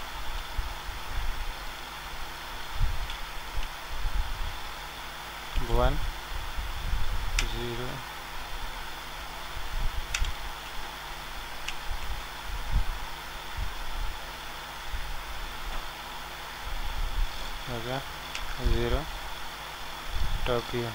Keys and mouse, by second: 1.6-7.1 drag, 5.5 KP_1, 7.4 ctrl+alt+KP_1, 10.1 KP_0, 13.0-14.8 drag, 14.8 ctrl+alt+z, 14.8 middle click, 15.5 click, 15.8 ctrl+z, 16.0 ctrl+z, 16.3 ctrl+z, 18.4 KP_0.